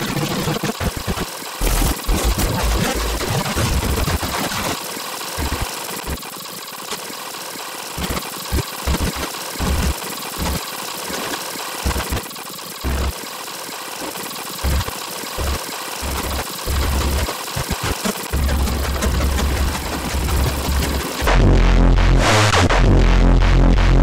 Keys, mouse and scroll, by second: 0.0-18.0 typing, 0.3 scroll up 2, 0.7 scroll down 4, 1.0 scroll up 2, 1.1 click, 1.3 click, 1.5 click, 1.5 scroll up 2, 2.1 click, 2.3 click, 2.4 click, 2.6 scroll up 1, 2.9 click, 3.2-3.6 scroll down 4, 3.6 click, 3.6 scroll up 2, 3.9 click, 4.0 click, 4.7 click, 4.8 scroll down 2, 4.9 click, 5.2 click, 5.3 scroll up 2, 5.6 scroll down 2, 5.8 click, 5.9-6.4 scroll up 3, 6.0 click, 6.1 alt+click, 6.4 click, 6.5 scroll down 2, 6.6 click, 6.7 scroll up 2, 7.0 click, 7.1 alt+click, 7.4 scroll down 4, 7.5 click, 8.7 alt+middle click, 9.1 scroll down 2, 9.3 middle click, 9.9 middle click, 10.1 alt+click, 10.6 click, 10.7 right click, 10.7 ctrl+click, 10.8 alt+click, 11.6 alt+click, 12.4 right click, 12.4 click, 12.5 right click, 12.5 click, 12.7 ctrl+click, 12.8 scroll up 1, 13.1 click, 13.2 click, 13.7 click, 13.9 click, 14.1 right click, 14.1 ctrl+click, 14.5 click, 14.9 click, 14.9 scroll up 2, 15.2 click, 16.2 scroll down 2, 16.3 right click, 16.8 scroll up 2, 17.4 click, 17.4 scroll up 2, 17.6 click, 17.8 click, 17.9 click, 18.1 click, 18.8 scroll up 2, 18.9 click, 19.0 shift+click, 19.5 alt+click, 19.8 alt+click, 20.5 alt+click.